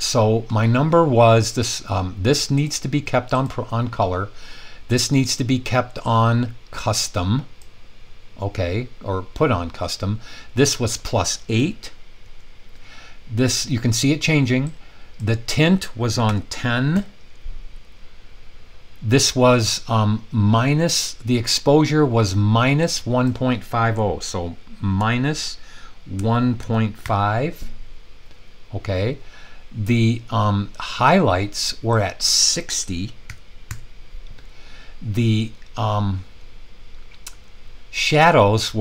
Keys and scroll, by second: 12.2 8, 16.2-16.9 typing, 25.0-27.5 typing, 33.3-33.6 typing.